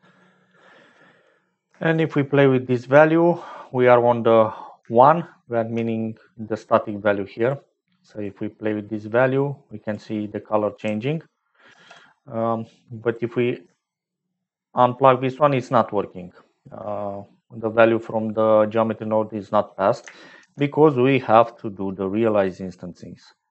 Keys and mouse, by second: 2.1 shift+middle click, 4.9 shift+middle click, 11.7 ctrl+z, 13.0 click, 14.0-16.6 shift+drag, 18.1 click, 19.2 click, 19.8 click, 20.3 shift+a.